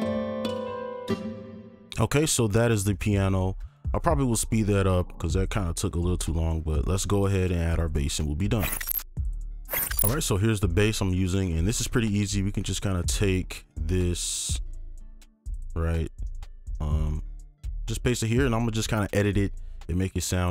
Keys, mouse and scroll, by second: 1.1 space, 3.1 double click, 5.5 right click, 12.5 scroll down 1, 13.5 ctrl+click, 16.3 double click, 17.1 right click, 18.8-20.5 scroll up 1.